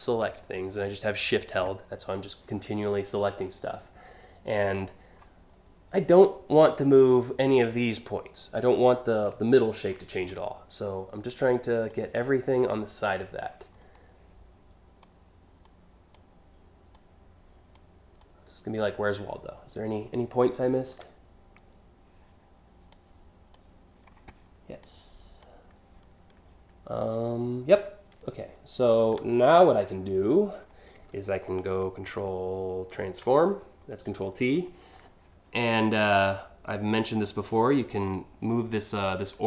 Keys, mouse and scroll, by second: 11.0-11.5 shift+drag, 14.6-15.2 shift+drag, 15.7-16.5 shift+drag, 17.3-17.7 shift+drag, 22.5-23.1 shift+drag, 24.4-25.0 shift+drag, 32.5 ctrl+t, 36.8-39.4 drag.